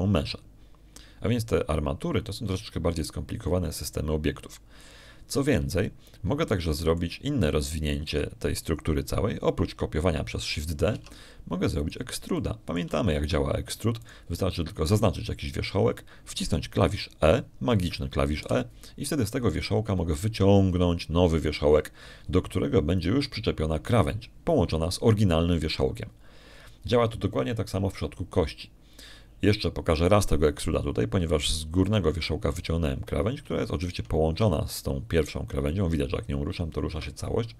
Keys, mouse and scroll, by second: 8.3 shift+click, 9.1 shift+middle click, 9.6 shift+click, 12.8 shift+Tab, 13.7 shift+right click, 14.2 shift+click, 15.1 shift+Tab, 15.9 shift+click, 20.3 e, 24.7 click, 33.7 click, 35.7 shift+click, 36.3 shift+g.